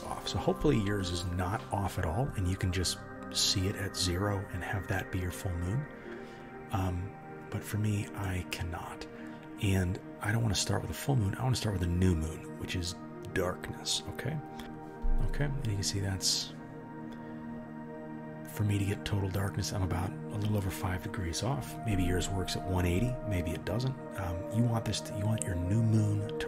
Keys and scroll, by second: 14.6 ctrl+z.